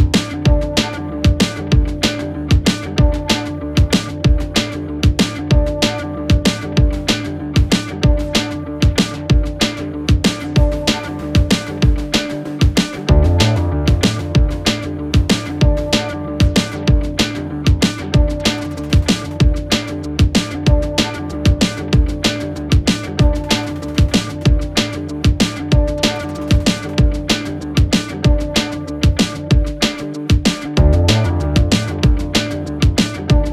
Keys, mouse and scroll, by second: 0.7-1.1 alt+scroll up 1, 1.3 alt+space, 1.4-1.9 alt+click, 1.9 alt+space, 2.0-2.9 alt+scroll up 2, 2.9 scroll up 1, 3.0 space, 3.1 click, 3.3-3.8 space, 4.8 click, 7.8 click, 8.5-8.9 alt+scroll up 2, 9.0 click, 9.7-10.6 click, 12.1 click, 13.5 Delete, 14.1 click, 14.8 ctrl+z, 15.3-15.8 click, 15.7 space, 16.1-16.4 click, 16.6 ctrl+z, 17.0-17.9 click, 17.9 space, 18.1-18.4 click, 18.8 space, 19.0-19.8 click, 20.6 space, 20.7 click, 21.0 space, 21.3 drag, 23.4 space, 23.8 click, 24.4 space, 24.6 click, 24.7 space, 25.4-25.7 click, 25.7-28.6 typing, 25.8 click, 26.4-26.8 click, 26.8 click, 27.1 click, 27.7 click, 28.0 click, 28.5 click, 29.1-29.9 click, 29.7 space, 29.8 click, 31.1-31.4 space, 31.3 click, 31.4 space, 31.6 click, 32.5 space, 32.6 click, 32.8 space, 33.1-33.5 drag.